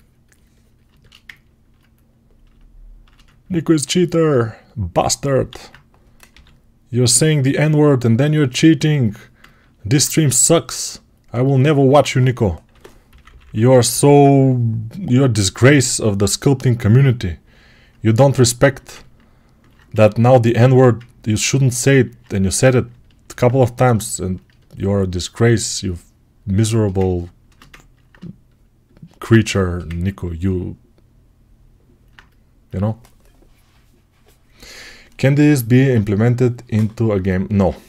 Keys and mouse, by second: 5.3 alt+q, 6.2 g, 11.7 1, 12.5 3, 12.9 [, 13.1 [, 16.9-22.0 right drag, 19.8 1, 22.0-26.9 shift+drag, 26.9-37.8 ctrl+alt+right drag.